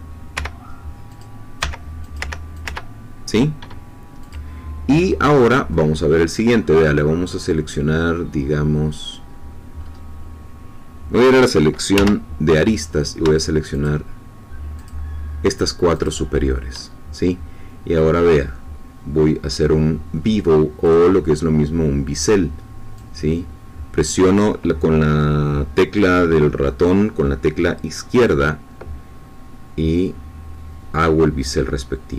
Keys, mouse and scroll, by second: 0.3-1.0 scroll up 2, 0.3 i, 1.0 click, 1.6 i, 2.0 click, 2.5 click, 4.2 click, 5.0-6.2 middle drag, 9.8-10.4 scroll up 2, 10.4-10.7 scroll down 2, 11.9 2, 12.7 click, 13.8-15.0 shift+drag, 16.0 shift+click, 20.8 click, 22.9-32.1 drag.